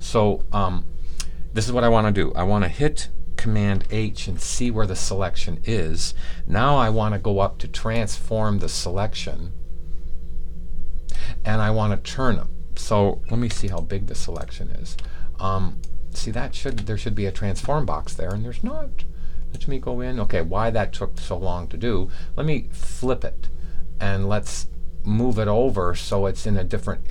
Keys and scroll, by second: 4.1 super+h.